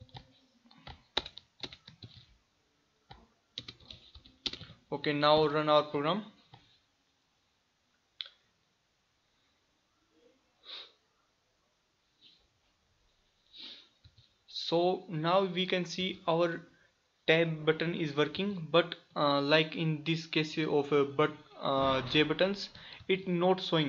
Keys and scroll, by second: 0.1 ctrl+c, 2.1 ctrl+v.